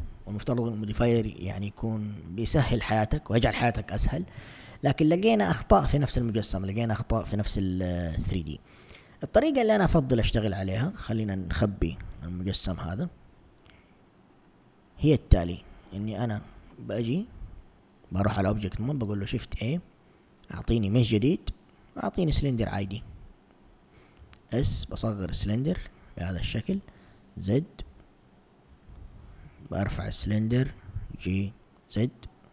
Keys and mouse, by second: 10.4 click, 11.9 h, 12.9 1, 14.5 click, 18.9 shift+a, 24.3 s, 26.7 z, 30.8 g.